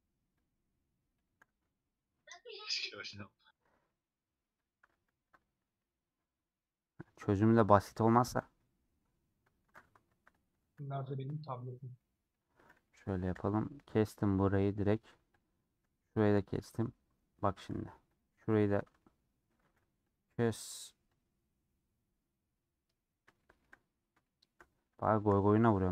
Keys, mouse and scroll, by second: 1.4 x, 2.2 middle click, 2.8 2, 2.9 alt+click, 3.8-5.2 middle drag, 5.2 ctrl+t, 5.4 scroll down 2, 5.7-7.8 middle drag, 7.8 scroll down 1, 7.8-9.9 middle drag, 9.9 3, 10.5 alt+shift+click, 10.9 scroll down 1, 11.0 middle click, 11.6-11.9 scroll down 2, 11.9-13.4 middle drag, 13.4 ;, 13.8-15.0 middle drag, 15.0 2, 15.5 middle click, 16.4 shift+click, 16.7 scroll down 1, 16.9-18.3 middle drag, 18.3 click, 19.0 middle click, 19.7 ctrl+z, 21.3 click, 23.3-23.9 scroll down 2, 23.4 shift+middle click, 24.2 shift+middle click, 24.6 scroll up 1, 24.7-25.9 middle drag.